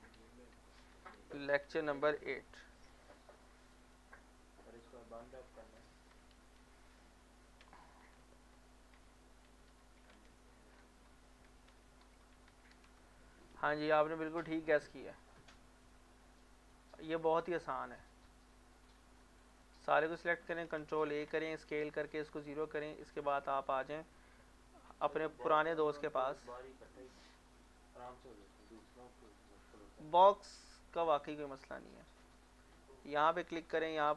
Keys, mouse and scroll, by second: 0.0-2.3 typing, 3.0 click, 5.9-7.6 typing, 9.0-13.2 typing, 14.3 click.